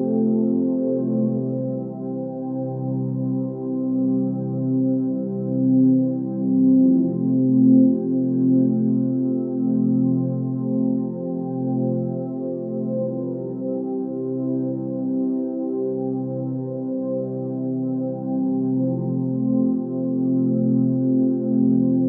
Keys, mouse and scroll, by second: 17.2 ctrl+space.